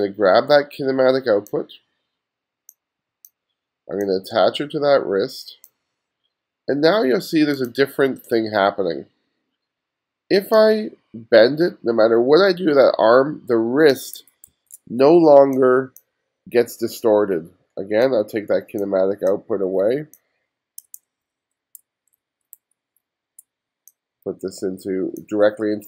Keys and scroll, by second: 14.5 super+z, 21.0 super+z.